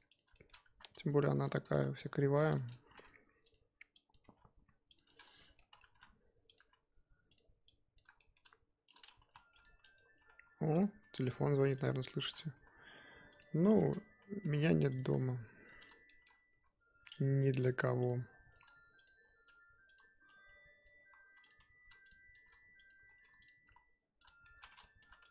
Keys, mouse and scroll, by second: 0.3 shift+middle click, 0.5 scroll up 1, 0.7 Tab, 1.3 g, 1.9 Tab, 2.6 click, 2.8 g, 4.1 click, 4.2 g, 5.5 shift+middle click, 5.9 e, 6.6 s, 7.9 click, 8.2-8.6 shift+middle drag, 8.6-9.1 scroll up 2, 9.1 g, 10.2 e, 11.0 s, 12.1 shift+middle click, 12.5 e, 14.4 s, 15.0 r, 16.0 shift+middle click, 16.5 e, 17.2 g, 18.5 r, 19.1 g, 21.0-23.6 typing, 24.4 shift+middle click, 25.0-25.3 typing.